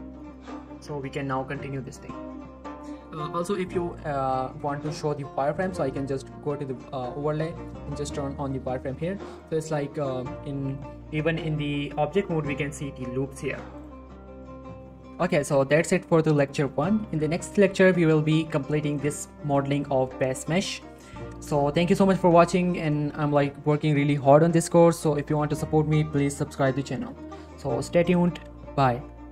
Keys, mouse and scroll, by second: 0.2 scroll up 1, 0.4 Tab, 0.5 scroll down 1, 0.7 Tab, 1.0 middle click, 1.2 shift+middle click, 1.4 Tab, 1.7 middle click, 2.0 shift+middle click, 2.2 middle click, 2.6 shift+middle click, 2.7-3.3 scroll up 1, 3.3 middle click, 3.5 click, 4.2 Tab, 4.4 middle click, 4.6 Tab, 4.8 middle click, 6.0 click, 8.4 click, 9.5 click, 9.7 right click, 9.9-10.9 middle click, 10.4 scroll up 1, 11.3 scroll up 1, 11.6 g, 11.8 right click, 12.2 click, 12.7 click, 13.2 scroll down 1, 13.3 middle click, 13.5-14.2 scroll up 2, 13.7 click, 13.9-14.7 middle click.